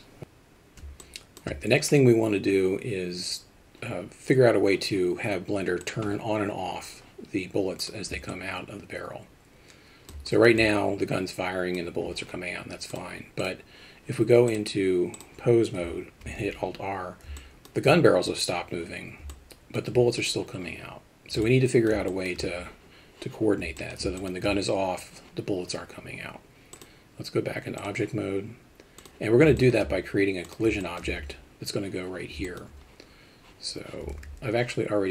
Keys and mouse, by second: 1.0-1.4 alt+shift+middle drag, 5.8 click, 7.8 drag, 8.3-10.4 alt+middle drag, 10.6-11.7 alt+middle drag, 12.9 click, 13.4 click, 14.5-15.2 drag, 16.2 alt+r, 17.4 middle drag, 19.3-19.7 alt+middle drag, 21.4-21.9 alt+middle drag, 22.1 alt+shift+middle drag, 23.8 alt+middle drag, 24.2 alt+shift+middle drag, 26.7-27.9 drag, 29.0 click, 29.6 alt+shift+middle drag, 30.4 click, 30.8 alt+middle drag, 32.4 middle drag, 34.1 alt+a.